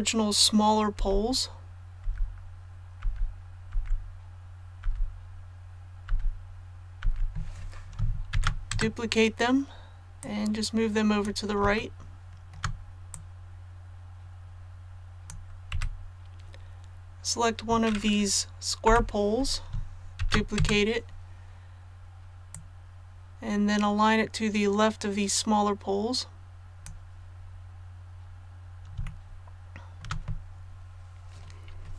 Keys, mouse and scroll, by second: 0.9 l, 3.7 typing, 4.8 typing, 7.0 typing, 8.3 shift+d, 10.2 click, 11.8 shift+middle click, 13.1-15.7 drag, 15.7 a, 18.8 l, 20.2 shift+d, 22.5-27.4 drag, 27.4-27.7 scroll up 1, 29.1 shift+middle click.